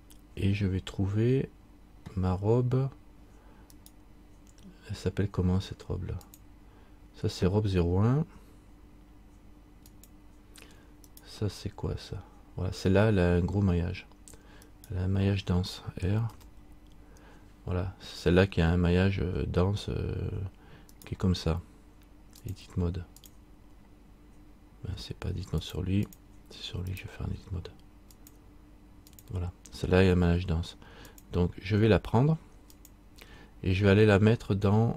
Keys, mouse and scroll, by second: 3.9 right click, 6.4 click, 10.0 click, 11.3 right click, 16.4 r, 22.6 click, 27.1 right click, 28.3 click.